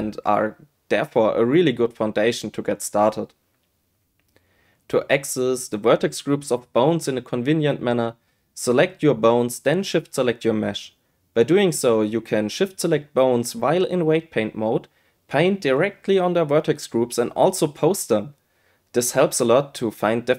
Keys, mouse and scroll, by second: 7.2 click, 9.3 click, 10.9 shift+click, 13.0-14.1 drag, 15.3 shift+click, 15.5 shift+click, 16.2 shift+click, 17.1 a, 17.2 a, 17.4 shift+click, 17.8 r, 18.5 click, 18.9 shift+click.